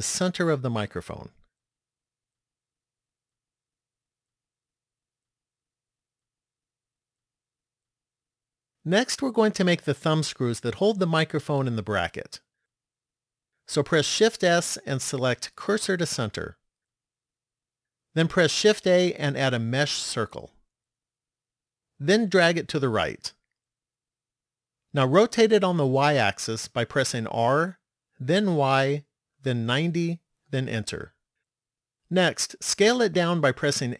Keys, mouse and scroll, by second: 3.8 middle click, 6.6-7.8 scroll down 2, 14.7 shift+s, 18.8 shift+a, 23.9 click, 27.1 r, 33.7 s.